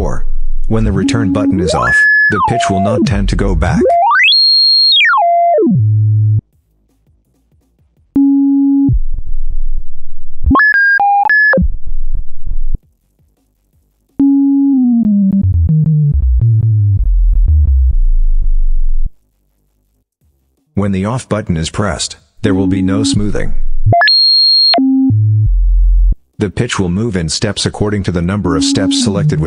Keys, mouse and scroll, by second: 0.5 scroll up 2, 1.3 scroll up 2, 2.0 scroll down 2, 2.6-2.9 scroll down 2, 3.3-4.0 scroll up 4, 4.7 scroll down 2, 5.3 scroll down 2, 7.4 click, 7.9 click, 8.6 scroll down 2, 10.1 scroll up 2, 11.2-11.6 scroll down 2, 13.4 click, 13.9 click, 14.5 scroll down 2, 20.3 click, 21.4 click, 22.2 click, 22.9-23.2 scroll down 2, 23.6-24.0 scroll up 2, 24.5-25.4 scroll down 6, 27.6 click, 28.2 click, 28.8-29.2 scroll down 2.